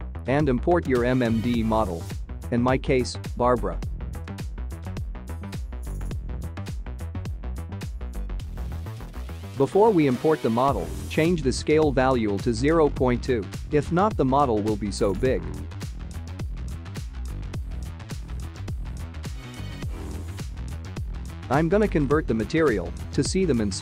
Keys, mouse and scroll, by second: 0.3 click, 0.8 click, 22.4 click, 22.6 `, 23.1 middle click.